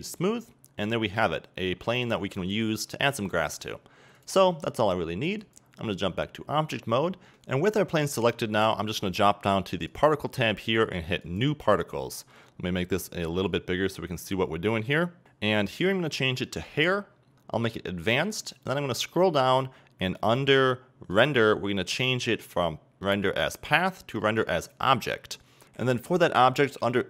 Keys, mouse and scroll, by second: 1.1 middle click, 1.8 scroll up 3, 2.1 middle click, 5.5-7.3 drag, 7.3-11.4 right drag, 11.4-17.4 drag, 24.8-27.0 drag.